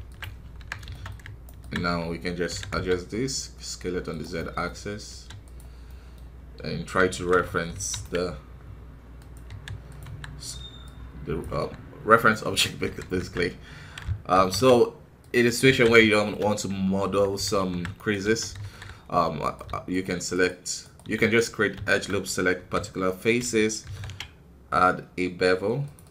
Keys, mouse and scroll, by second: 0.4 scroll up 2, 0.5 Tab, 0.9 shift+middle click, 1.4-2.5 alt+right drag, 2.5 s, 4.3 middle click, 5.0 s, 5.8-7.7 middle drag, 7.7 ctrl+r, 10.0 KP_1, 10.8 click, 11.5 Tab, 11.6 scroll up 2, 12.2 middle click, 12.8 KP_1, 13.1 Tab, 16.0 shift+middle click, 16.3 scroll up 1, 16.9-17.5 scroll up 1, 17.5 alt+KP_3, 17.9 right click, 18.6 alt+KP_2, 19.4-21.8 right drag, 21.8 shift+middle click, 22.0-22.5 scroll up 2, 22.5 r, 26.0 click.